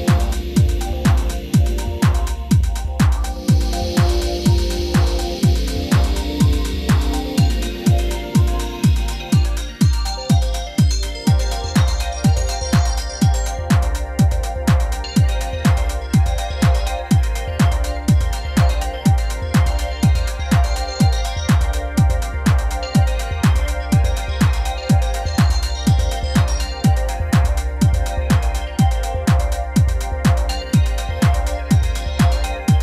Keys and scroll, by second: 22.0-24.5 typing.